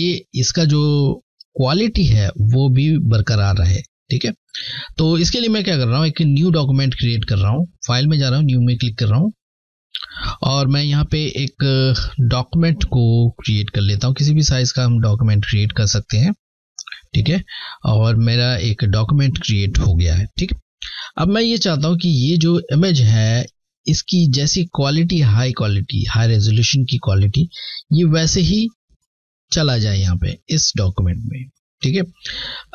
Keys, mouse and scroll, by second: 0.0 alt+Num_Lock, 0.0-0.7 alt+scroll up 1, 2.3-3.0 typing, 2.4 alt+scroll down 1, 3.4 alt+scroll down 1, 5.7 click, 9.8 click, 17.3 click, 20.7 click, 28.0 click, 30.3 click.